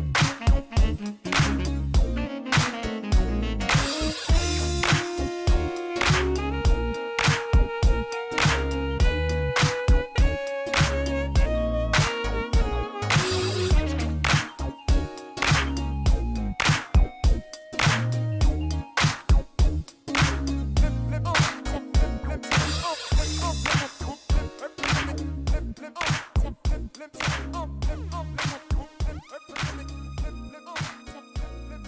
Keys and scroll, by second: 1.1-2.8 typing, 2.0 Return, 5.8 Tab, 7.3 ctrl+r, 9.2 Return, 9.6 s, 9.8 z, 12.8 ctrl+b, 13.4 ., 13.6 0, 13.8 5, 14.2 Return, 18.6 ctrl+r.